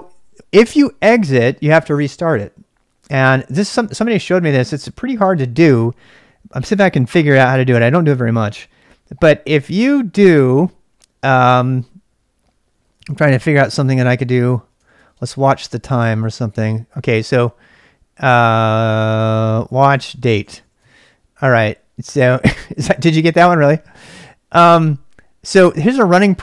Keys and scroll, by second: 12.5-17.2 typing, 18.5 ctrl+c, 19.3-21.0 typing.